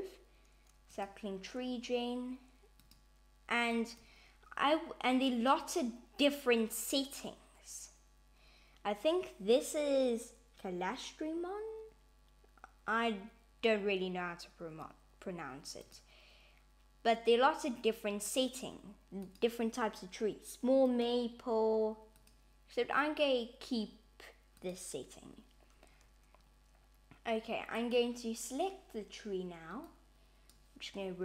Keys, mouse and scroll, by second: 3.0 click, 3.7 click, 15.8 click, 19.2 click, 21.1 click, 22.2 click, 27.8 click, 29.9 click.